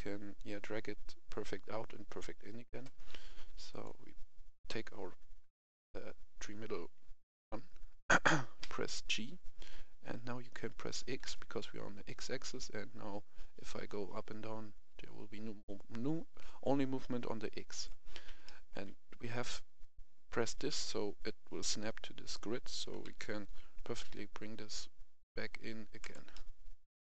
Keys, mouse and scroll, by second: 3.0-3.5 scroll down 1, 3.6-4.7 drag, 8.6 g, 11.2 x, 17.7 click, 18.4 shift+middle click, 18.9-21.1 scroll up 1, 22.7 g, 23.0 x, 25.9 click, 26.2-27.2 middle drag.